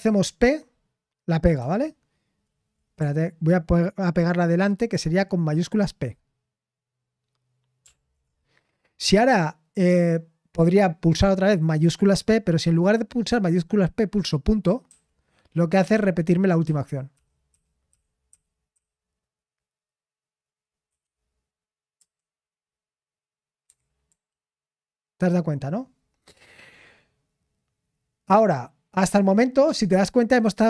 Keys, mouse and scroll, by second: 1.3-2.1 typing, 7.6-8.3 typing, 25.4-26.1 typing.